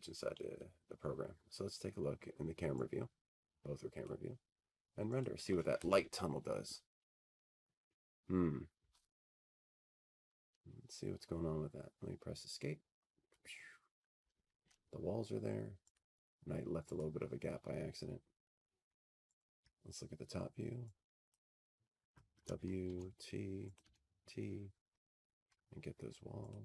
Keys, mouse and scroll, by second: 1.4 click, 2.7 click, 4.7 click, 6.1 middle click, 6.1 click, 9.6 click, 10.8 click, 18.6 Escape, 21.7 click, 22.7 click, 25.0 ctrl+click.